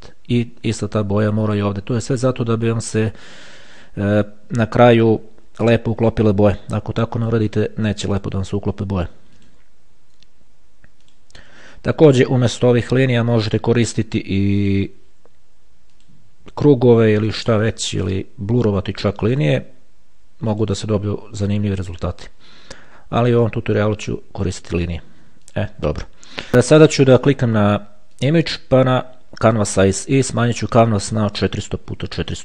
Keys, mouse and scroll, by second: 2.3 shift+click, 3.9 shift+click, 7.4 click, 9.6 shift+click, 11.3 shift+click, 13.7 shift+click, 14.9 shift+click, 16.2 click, 17.9 shift+click, 19.5 shift+click, 20.7 click, 22.1 shift+click, 24.0 click, 25.7 click, 28.4 click, 29.7 click, 30.7-31.8 drag, 32.1 KP_4.